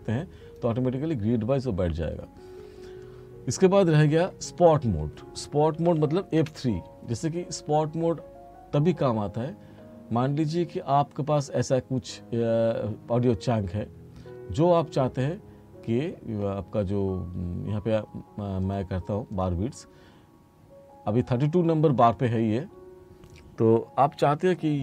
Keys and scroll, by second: 5.8 r, 6.4 F3.